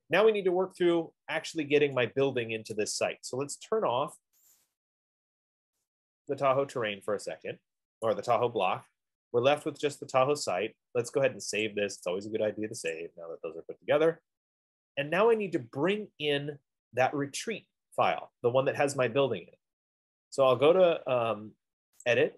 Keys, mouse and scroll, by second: 3.2 right click, 4.8 click, 8.2 right click, 10.0 middle click, 12.1 click, 13.2 F15, 13.2 click.